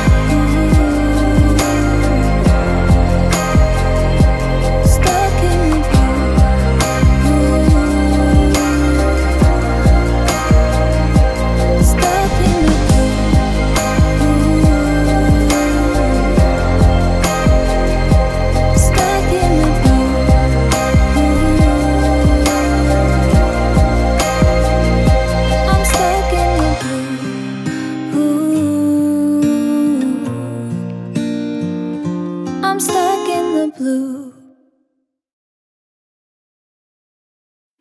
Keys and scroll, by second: 7.2 ctrl++, 7.3 ctrl++, 7.5 ctrl++.